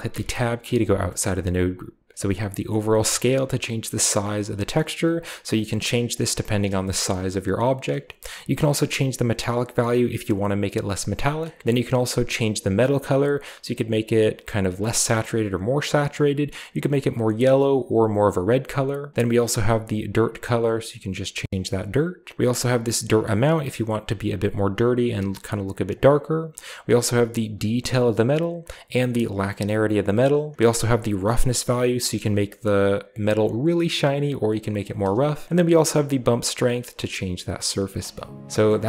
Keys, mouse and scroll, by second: 0.0 n, 0.4-2.0 scroll up 1, 2.0 click, 2.1 a, 2.1-5.2 drag, 5.4 click, 8.2-11.1 drag, 11.5 scroll down 2, 11.8 click, 11.9-18.3 drag, 19.3 click, 20.3-21.4 drag, 21.4 middle click, 22.4-25.7 drag, 25.7 middle click, 26.6-27.8 drag, 27.8 middle click, 28.6-29.6 drag, 29.7 middle click, 30.3-31.8 drag, 32.0 shift+middle click, 32.1-34.7 shift+drag, 35.0-35.4 shift+middle drag, 35.4-37.6 drag, 37.7 click, 37.8 middle click, 38.1-38.5 scroll up 1, 38.5 a.